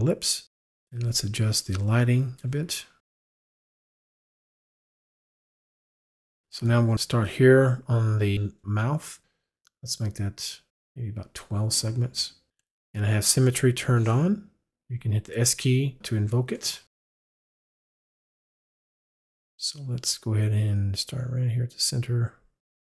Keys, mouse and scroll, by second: 1.1 click, 3.1 right click, 3.7 right click, 10.7 click, 18.2 click, 18.3 s, 21.4 click.